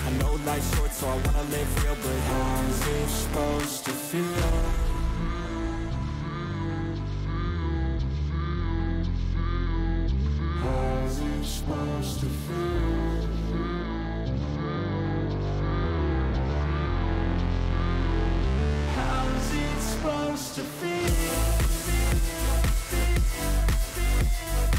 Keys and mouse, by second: 0.5-2.4 drag, 2.8 click, 3.5 click, 5.3-8.9 drag, 9.3 click, 9.9 click, 13.4 click, 14.3 click.